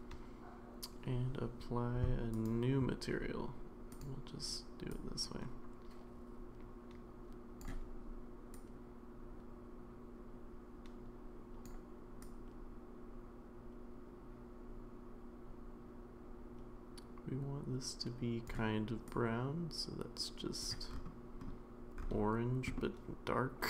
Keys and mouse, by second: 2.5 click, 4.0 click, 22.8-23.6 middle drag.